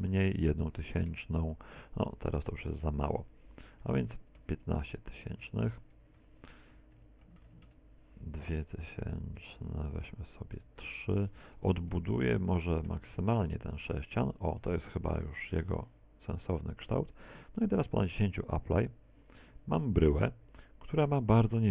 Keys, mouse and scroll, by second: 1.8 z, 2.4 z, 2.9 middle click, 7.6 click, 10.9 click, 13.5 End, 13.8 Return, 17.0 Return, 20.0 Return.